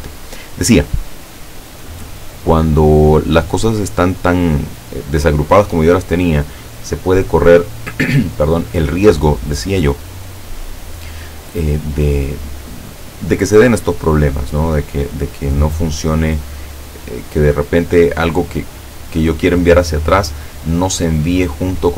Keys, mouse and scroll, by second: 1.7 click, 2.9-4.3 drag, 14.7 click, 16.1-17.7 drag.